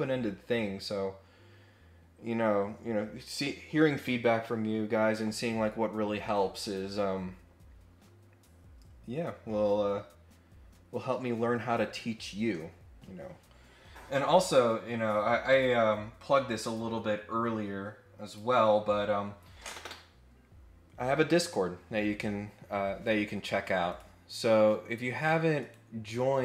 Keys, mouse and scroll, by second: 15.5 click, 18.2 click, 23.8 click, 25.6 right click.